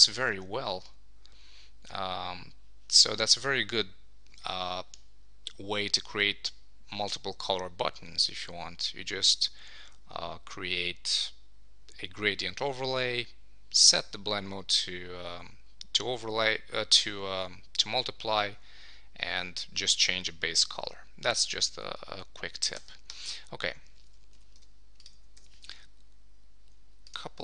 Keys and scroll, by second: 22.8 Escape, 24.0 super+s, 25.3 Escape.